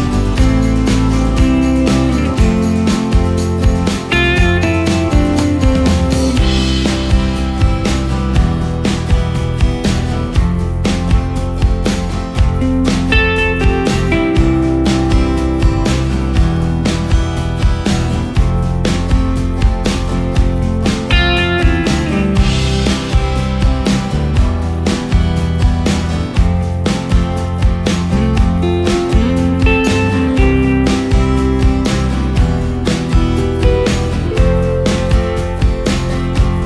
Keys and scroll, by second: 1.8 Delete, 8.0 ctrl+space, 15.0 ctrl+space, 20.0 ctrl+alt+shift+space, 20.5 ctrl+alt+shift+space, 21.1 ctrl+alt+shift+space, 25.4 ctrl+shift+space, 27.1 ctrl+shift+space, 27.8 ctrl+shift+space, 30.3 ctrl+shift+space, 31.0 ctrl+shift+space.